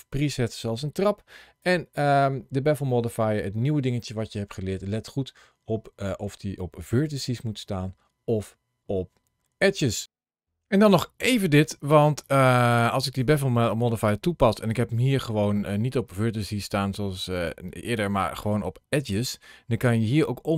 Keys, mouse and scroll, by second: 1.5 click, 2.7 middle click, 10.0 shift+middle click, 12.1 click, 15.9 click, 17.2 click.